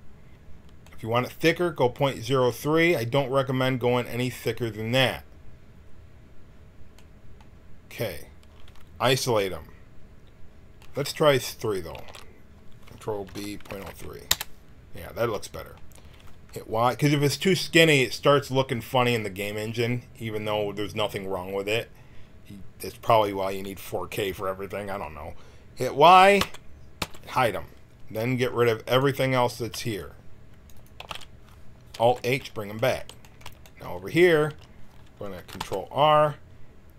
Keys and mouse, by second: 0.8-2.1 middle drag, 12.0 ctrl+z, 13.3 ctrl+b, 26.4 y, 27.0 h, 28.8-30.2 drag, 29.8 c, 30.9 x, 32.0 alt+h, 34.5 a, 35.5 ctrl+r.